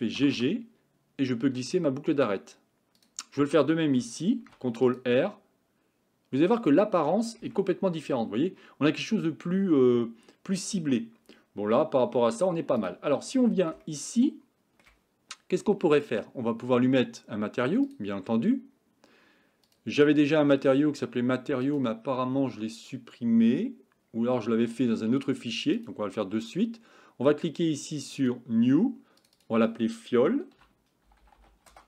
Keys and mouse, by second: 0.2 g, 4.4 ctrl+r, 7.9 Tab, 12.8 click, 13.9-14.9 shift+middle drag, 17.9 click, 19.7-21.9 drag, 28.2 click, 29.2 click, 29.5-31.8 drag.